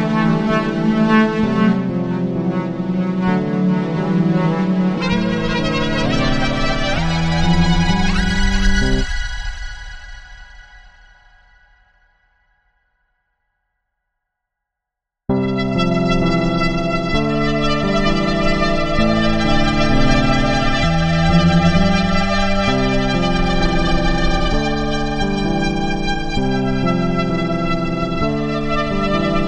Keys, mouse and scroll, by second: 0.5-3.2 drag, 3.6-15.2 drag, 18.3-18.8 drag, 19.1-22.0 drag, 22.4-25.1 drag, 25.2 click.